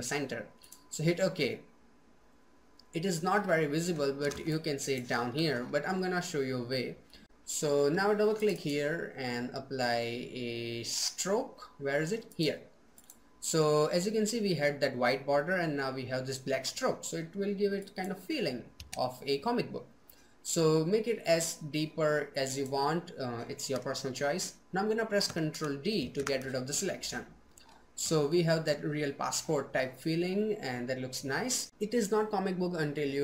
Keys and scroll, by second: 24.8 ctrl+d.